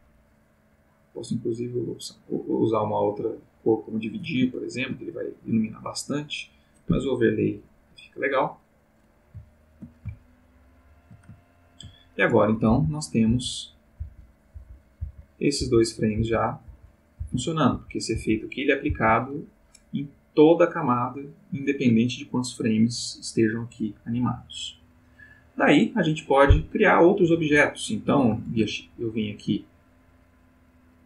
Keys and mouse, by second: 0.2 click, 1.5 click, 4.5 ctrl+middle click, 6.3 click, 6.9 Escape, 7.2 click, 8.8 click, 9.4 ctrl+middle click, 10.1-11.3 ctrl+shift+middle drag, 11.4 ctrl+shift+middle click, 12.6 Right, 13.3 Left, 13.9 Right, 14.5 Left, 14.9 Right, 15.5 Left, 16.1 Right, 16.7 Left, 17.2 Right, 17.7 Left, 18.1 Right, 18.9 Right, 28.4 shift+a, 29.8 click.